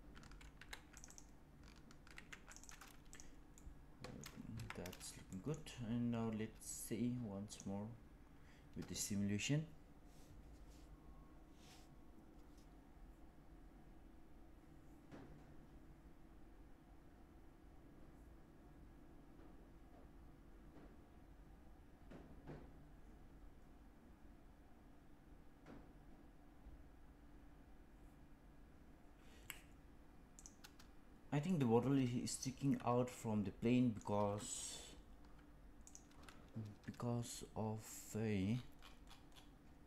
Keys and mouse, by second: 0.4 ctrl+r, 2.0 ctrl+r, 3.5 middle click, 4.4 Tab, 5.2 middle click, 31.4-33.9 middle drag, 35.8 click.